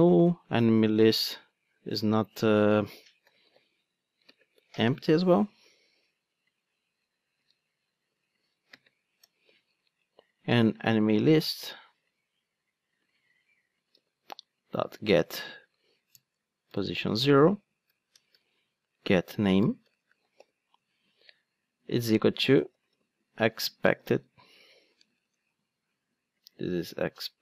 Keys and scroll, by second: 4.2 super+v, 4.3 ctrl+space, 7.5 super+x, 8.7 ctrl+space, 9.2 Return, 10.5 Return, 10.5 super+v, 13.1 super+c, 13.9 super+v, 16.4 Return, 20.7 Return.